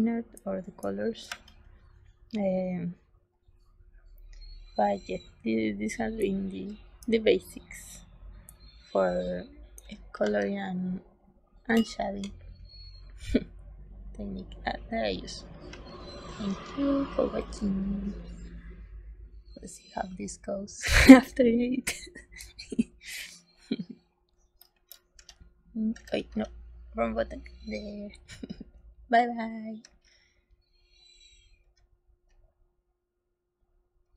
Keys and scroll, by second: 0.3 space, 1.2 s, 6.1 space, 8.4 space, 10.1 ctrl+s, 15.6 ctrl+s.